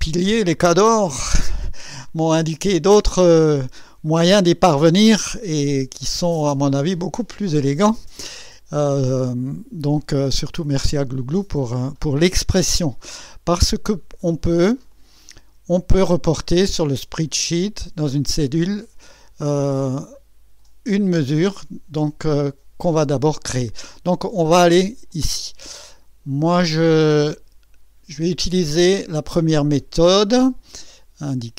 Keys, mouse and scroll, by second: 14.9 click, 25.1 click, 30.5-31.5 drag.